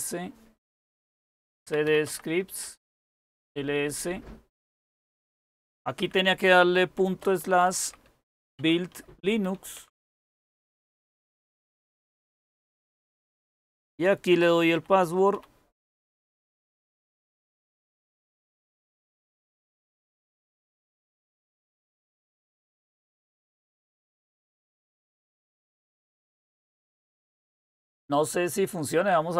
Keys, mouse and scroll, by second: 1.1-3.5 typing, 6.7-11.1 typing, 13.7-17.2 typing.